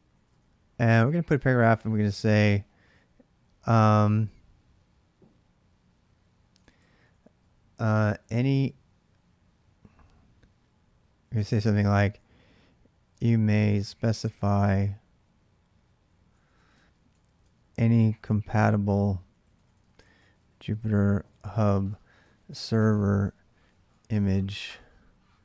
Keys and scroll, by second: 0.0-0.5 typing, 6.1-8.4 typing, 10.5-14.8 typing, 15.8-25.4 typing.